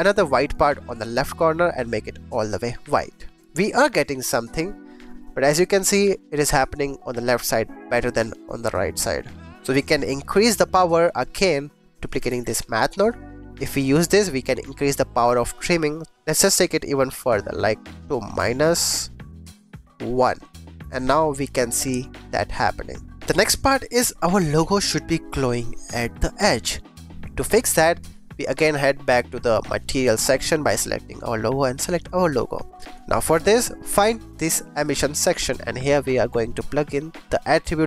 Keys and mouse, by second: 0.4 click, 1.2 click, 3.3 x, 9.4 click, 10.6 click, 11.9 click, 12.2 shift+d, 13.0 click, 15.5-20.8 shift+drag, 20.8 g, 20.8 x, 24.6 shift+click, 30.3 click, 31.9 click, 32.9 click, 34.1 click, 34.7 click, 37.2 click.